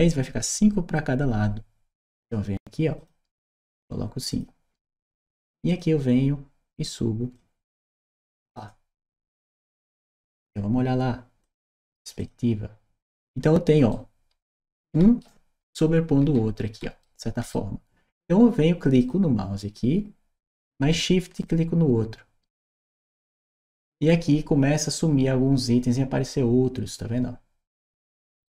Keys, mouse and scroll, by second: 2.0 click, 2.8 click, 3.3 click, 4.1 click, 5.5 click, 7.2-8.4 drag, 11.2 click, 12.0 click, 13.7-15.0 right drag, 15.6-16.8 right drag, 16.1 a, 17.0 right click, 18.8 click, 21.2 shift+click.